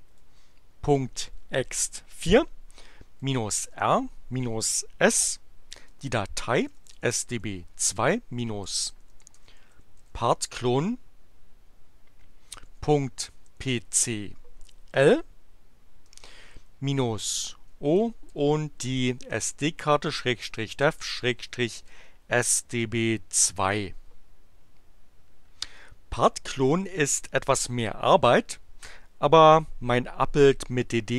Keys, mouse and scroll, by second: 3.0-4.4 typing, 5.9-10.5 typing, 12.6-14.4 typing, 16.1-18.3 typing, 19.8-22.4 typing.